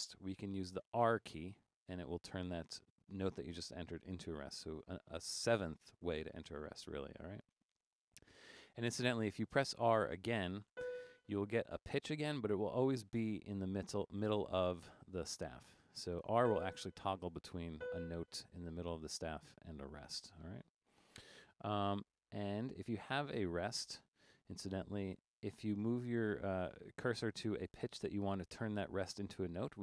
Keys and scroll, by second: 1.1 r, 9.5 Up, 9.7 Up, 9.7 Up, 10.1 Up, 10.4 Up, 10.7 r, 15.8-17.8 typing, 19.6 r, 25.0 Down, 25.2 Down, 25.4 Down, 25.6 Down, 25.7 Down, 25.9 Down, 26.1 Down, 26.7 Up, 26.8 Up, 27.0 Up, 27.4 Up.